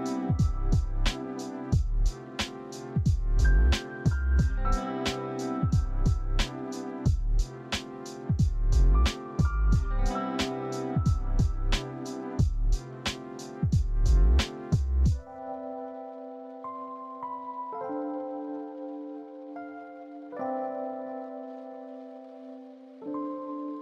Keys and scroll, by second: 1.0 typing, 1.2 Return, 2.3 Tab, 4.4-4.9 typing, 6.3-7.0 typing, 9.5 typing, 12.1 z, 18.2 Caps_Lock, 18.8 a, 19.4 s.